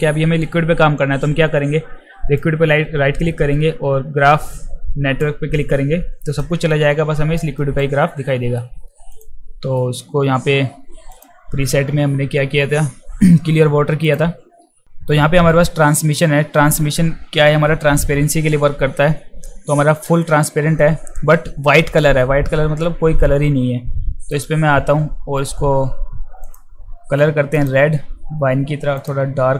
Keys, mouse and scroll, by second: 2.4-5.2 right drag, 6.4 alt+right click, 7.6 alt+right click, 8.3 alt+middle click, 9.2 click, 9.8 alt+middle click, 11.1 click, 14.1 click, 24.3 click, 26.4 click, 27.5 click, 29.0 click.